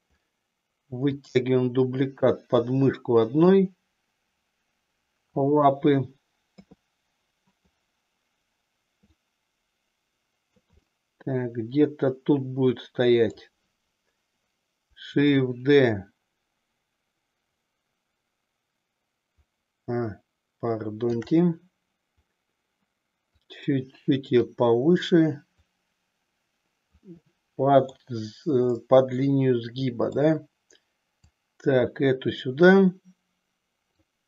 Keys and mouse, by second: 1.1-2.8 drag, 3.5-5.4 drag, 6.5 KP_3, 9.2-10.7 drag, 11.0-13.5 middle drag, 15.4-21.3 shift+drag, 23.3-24.6 drag, 25.8-27.0 drag, 27.3 middle click, 28.8-30.3 middle drag, 31.2-33.9 drag.